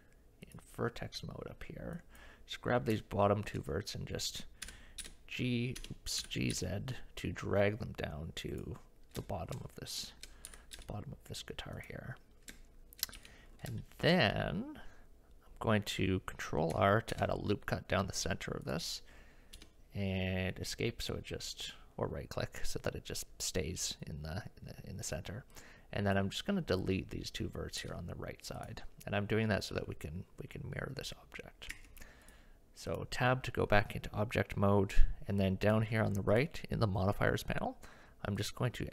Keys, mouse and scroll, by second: 0.5 click, 2.0 click, 3.1 shift+middle click, 4.6 g, 6.2 g, 9.3 shift+middle click, 10.1 shift+middle click, 10.5 g, 12.5 shift+middle click, 13.2 KP_1, 13.8 shift+middle click, 17.1 ctrl+r, 25.7 click, 27.8 x, 31.7 Tab, 32.3-34.8 drag, 35.7 click, 38.5-38.9 drag.